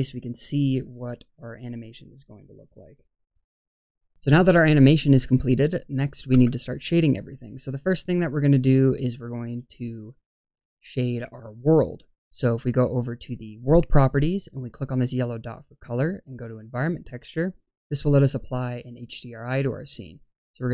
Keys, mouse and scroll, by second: 6.3 space, 13.3-14.6 drag, 15.3-16.8 drag.